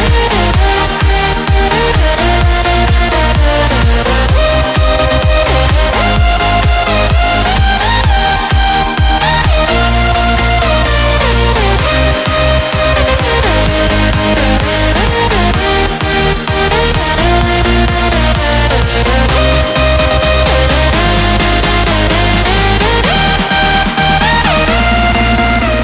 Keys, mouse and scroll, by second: 5.1-9.2 typing, 11.8 click, 13.3 v, 14.0-23.0 drag.